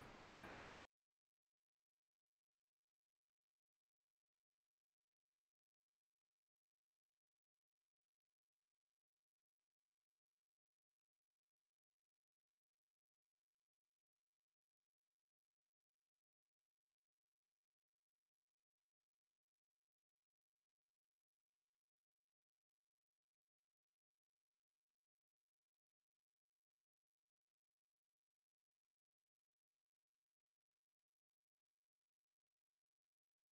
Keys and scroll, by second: 1.6 ctrl+space, 3.5 ctrl+space, 9.5 ctrl+space, 11.9 space, 21.7 ctrl+space, 28.0 ctrl+space, 31.2 ctrl+space.